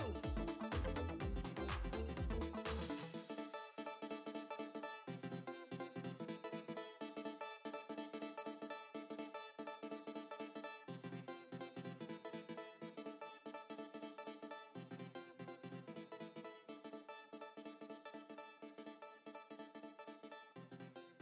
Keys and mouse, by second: 0.0 alt+click, 2.1 click, 9.9 space, 11.4 ctrl+click, 14.9 ctrl+BackSpace, 18.0 ctrl+d, 19.1 space.